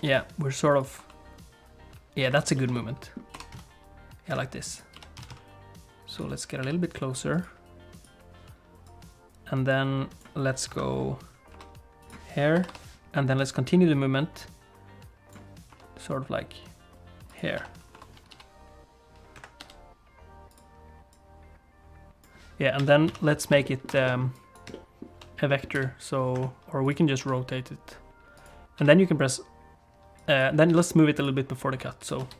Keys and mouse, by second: 0.0 g, 1.0 r, 2.5 shift+middle click, 2.7 middle click, 3.3 r, 4.8 click, 4.9 g, 6.6 g, 8.9-10.3 drag, 10.7 KP_7, 11.5 r, 12.5 i, 13.5-15.4 drag, 15.7 r, 17.6 i, 18.3 g, 19.6 g, 21.2-22.3 drag, 22.8 a, 23.1 KP_Decimal, 23.7 ctrl+click, 24.0 alt+a, 24.3 click, 24.9 shift+click, 25.6 middle click, 25.7 v, 26.8 click, 27.2 r, 28.8 a, 30.2 click, 30.7 g, 31.8 click, 32.2 space.